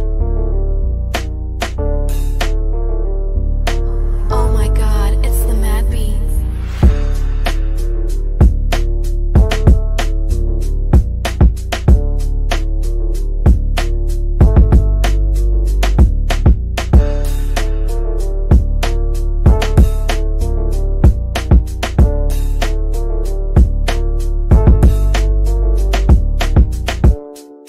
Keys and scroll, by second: 3.2 shift+F2, 3.7 Escape.